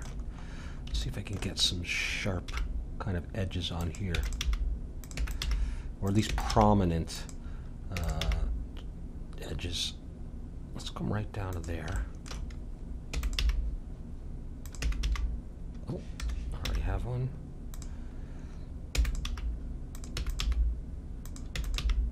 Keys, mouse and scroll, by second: 2.5 g, 2.5 middle click, 4.1-6.5 typing, 7.9 e, 8.2 g, 12.0-13.9 middle drag, 13.1 e, 13.4 g, 14.8 e, 16.7 g, 18.9 e, 19.3 g, 20.1 e, 20.4 g, 21.5 e, 21.8 g.